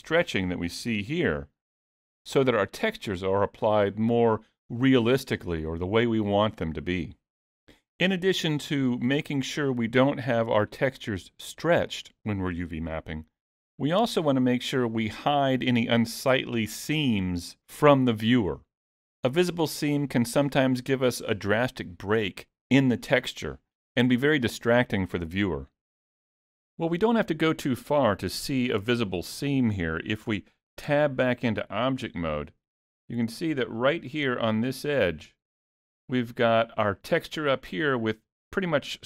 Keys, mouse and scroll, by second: 0.9 g, 2.8 middle click, 5.6 middle click.